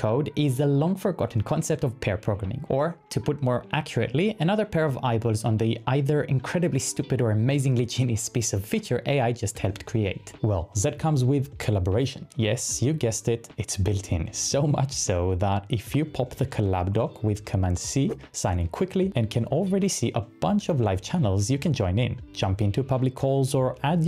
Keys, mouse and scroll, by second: 16.8 shift+super+c.